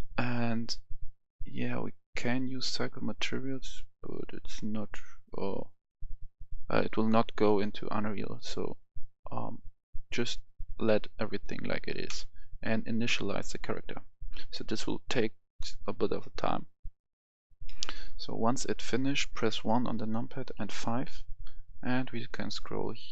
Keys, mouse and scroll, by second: 17.5-18.8 middle drag, 19.4 KP_1, 20.5 KP_5, 21.2-22.2 scroll up 1, 22.4 shift+middle click.